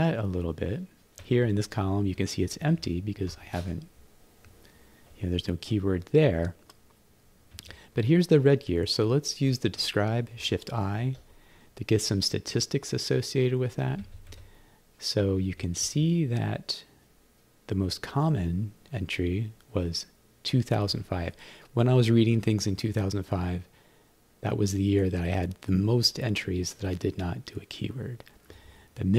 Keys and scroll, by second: 1.2 Down, 2.2 Up, 7.5 Right, 10.9 shift+i, 14.0 Right, 28.5 Right.